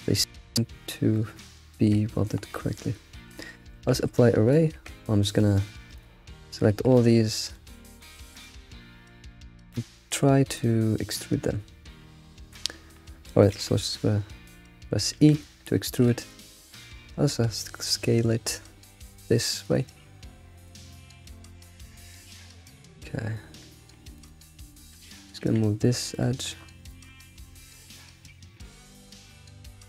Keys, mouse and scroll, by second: 0.5-1.0 scroll down 3, 3.9 ctrl+a, 4.3-4.7 scroll down 1, 4.7 Tab, 5.3 alt+click, 5.9 alt+shift+click, 6.3 alt+shift+click, 6.7 scroll down 2, 6.9-8.4 shift+middle drag, 8.4 alt+shift+click, 10.5-13.5 shift+middle drag, 10.7 alt+shift+click, 15.1 e, 17.1 s, 21.1 Tab, 21.7 alt+click, 22.1-23.8 shift+middle drag, 23.8 a, 24.1 click, 24.4 alt+click, 24.7 click, 25.4 g, 26.4 shift+middle click, 26.6-27.6 scroll up 9, 26.9 shift+middle click, 27.8 shift+click, 28.2-28.8 scroll down 5, 29.3 g.